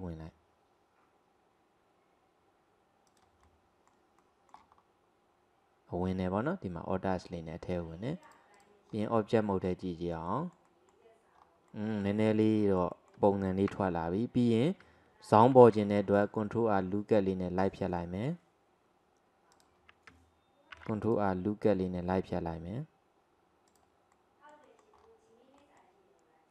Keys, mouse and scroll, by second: 3.5-4.7 middle drag, 4.7-5.3 scroll up 1, 5.3-6.9 scroll up 2, 7.0 scroll down 1, 8.3 click, 8.9 scroll down 4, 9.2-11.4 middle drag, 11.4-11.7 scroll up 1, 11.7-13.8 middle drag, 13.8 Tab, 14.1-15.6 scroll up 1, 15.6 ctrl+r, 20.8 ctrl+r, 24.1 middle click, 25.0-25.6 scroll down 1, 25.6-26.5 middle drag.